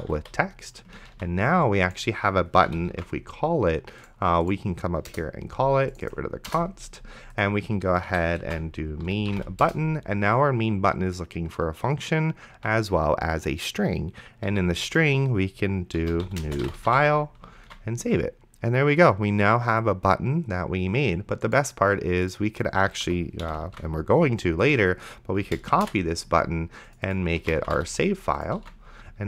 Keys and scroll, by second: 0.0-0.7 typing, 1.4 ctrl+s, 2.7 ,, 3.2 ctrl+s, 5.1 Return, 6.5 BackSpace, 8.1 Tab, 8.5-10.1 typing, 12.5 Tab, 14.5 :, 15.9-17.5 typing, 17.9 ctrl+s, 23.3 Left, 23.4 ,, 23.9 ctrl+s, 26.0 alt+shift+Down, 27.4-28.4 typing, 28.9 ctrl+s.